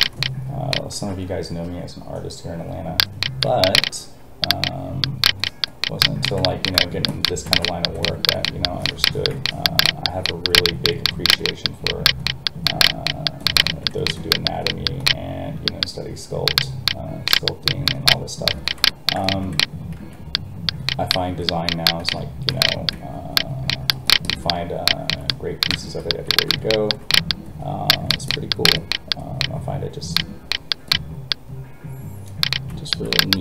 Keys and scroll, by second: 0.9 alt+a, 19.9 alt+a.